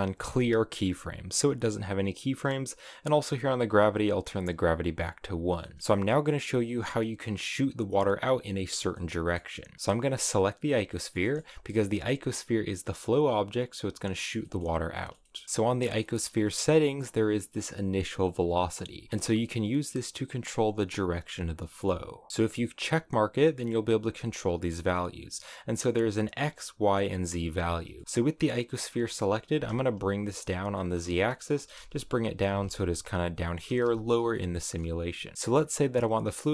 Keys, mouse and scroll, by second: 4.0-5.5 drag, 5.5 middle click, 5.8-8.7 scroll down 2, 8.8 middle click, 9.8 right click, 10.8-14.2 middle drag, 14.3-15.3 shift+middle drag, 15.3-15.7 scroll down 2, 15.7-21.6 shift+middle drag, 22.7 click, 23.0 click, 27.5 scroll down 3, 27.9 shift+middle click, 28.2 right click, 28.6 right click, 29.3 g, 30.6-31.2 scroll up 5, 30.6 middle click, 31.2 middle click, 31.5 g, 32.3 g, 33.1-33.5 scroll down 3, 33.5 g, 34.2 middle click, 34.8 scroll down 4, 35.0 middle click, 35.9-36.2 scroll up 2, 36.2-36.5 middle drag.